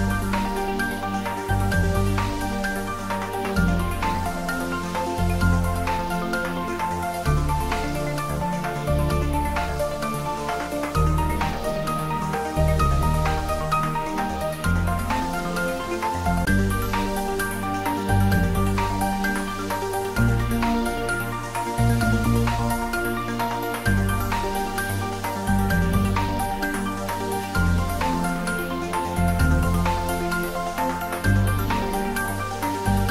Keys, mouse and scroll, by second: 0.5 click, 1.1 alt+shift+click, 2.5 click, 2.9 alt+click, 10.0 click, 18.9 scroll down 1, 20.4-22.3 drag, 23.8-24.6 scroll down 1, 26.8 Tab, 28.1 click, 28.7 scroll down 1, 29.3-30.2 middle drag, 31.7 click.